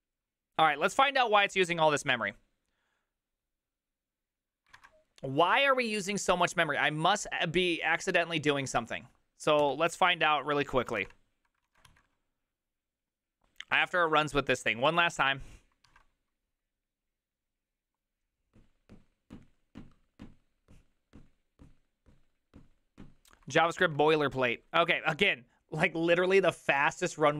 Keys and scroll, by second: 10.9 alt+{, 10.9 ctrl+a, 11.1 2, 11.7 ctrl+a, 11.9 3.